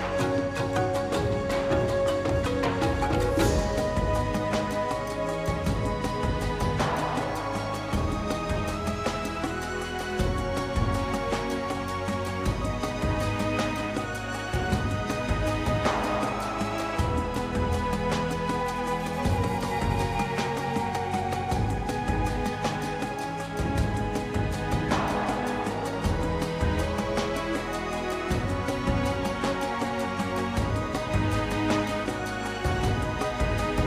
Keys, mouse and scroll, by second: 0.2 f, 0.6 scroll up 1, 0.7 shift+middle click, 1.3-2.3 drag, 3.1 click, 3.3 f, 3.7 f, 3.9-4.9 drag, 5.1 shift+middle click, 5.6-8.8 drag, 8.9 click, 9.6 KP_1, 9.9 shift+middle click, 10.3-12.7 drag, 12.7 scroll up 2, 12.8 middle click, 13.0 scroll down 1, 13.2 shift+middle click, 13.8-14.9 drag, 14.9 KP_1, 15.2-17.6 drag, 17.6 g, 18.1-18.9 f, 19.3-20.7 drag, 20.8-22.6 drag, 22.6-23.3 scroll down 5, 23.3 click, 23.9 ctrl+s, 24.0 scroll down 2, 24.4 shift+middle click, 25.0 ctrl+s, 25.5-26.5 drag, 26.9 shift+c, 27.6 KP_0, 28.7 KP_1, 29.0 drag, 29.3 Delete, 29.5-30.1 shift+middle drag, 30.1 shift+a, 31.3 scroll up 2, 31.5 middle drag, 31.8 g, 32.3 KP_0, 32.6 scroll down 1, 33.1 g.